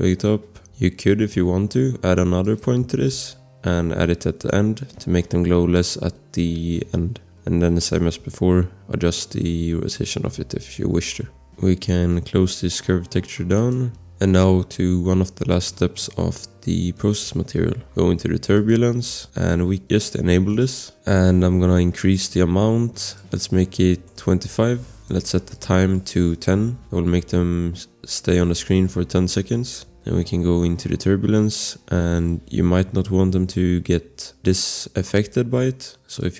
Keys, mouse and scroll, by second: 0.4 scroll, 1.0 scroll, 2.4 click, 3.3 click, 7.0 click, 13.6 click, 14.0 scroll, 18.5 click, 21.1 scroll, 23.2 click, 23.5-24.7 typing, 24.9 click, 26.2-27.2 typing, 29.6-30.1 scroll, 36.2 click.